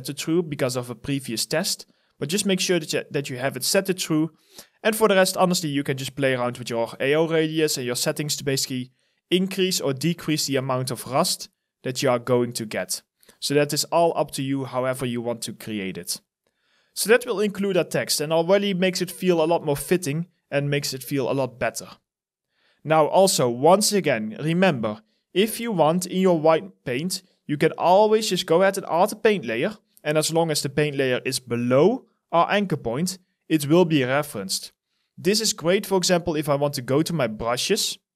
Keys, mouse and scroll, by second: 15.9 alt+right click, 17.0 alt+click, 21.2 alt+click, 22.2 alt+middle click.